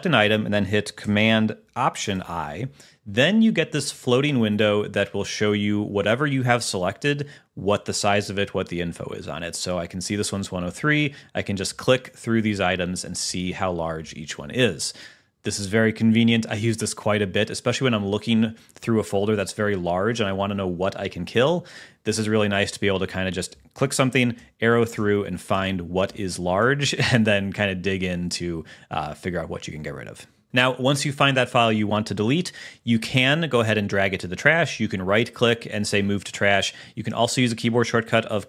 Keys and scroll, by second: 2.4 alt+super+i, 24.7 Right.